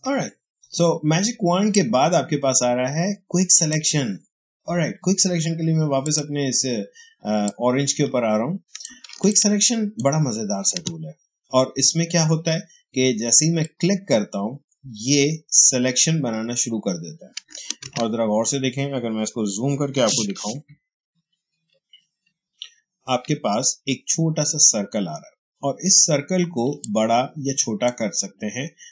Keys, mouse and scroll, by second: 0.0 space, 1.6-5.9 drag, 7.1 space, 7.3 click, 7.6 space, 9.2-13.0 ctrl+drag, 13.5-17.7 drag, 17.7 ctrl+d, 21.6 ctrl+=, 26.6 space, 26.7 click, 27.1 space.